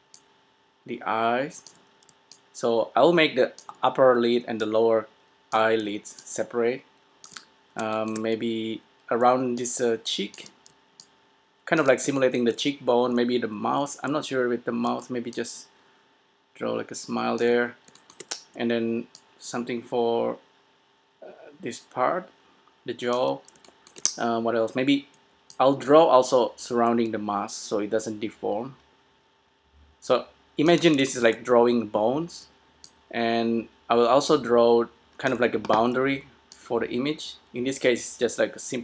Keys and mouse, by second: 0.0 d, 0.5-2.1 drag, 2.3 d, 2.5-4.3 drag, 3.8 d, 4.3 d, 4.8-8.1 drag, 5.8 d, 6.2 d, 7.3 d, 9.4 d, 9.7-12.8 drag, 10.7 d, 10.9 d, 12.0 d, 12.8-14.2 middle drag, 13.2 d, 13.9 d, 14.2-15.1 d, 15.5-17.2 drag, 17.7 d, 17.9-19.4 middle drag, 18.8 d, 19.3 d, 19.4-21.3 drag, 23.4 d, 23.5-25.6 middle drag, 23.5 d, 25.3 d, 25.6-27.4 drag, 31.2-33.0 middle drag, 32.7 d, 33.0-34.8 drag, 35.5 d, 36.1 d, 36.8-38.4 drag, 36.8 d.